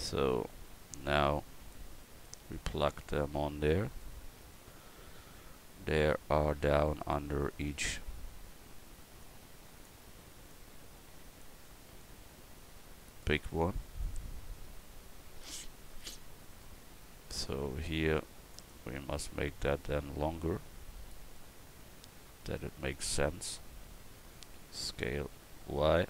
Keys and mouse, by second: 0.7 KP_1, 1.2 click, 1.2 right click, 2.2 click, 9.2-18.5 drag, 18.5-21.1 right drag, 19.3-24.9 drag, 24.9 s.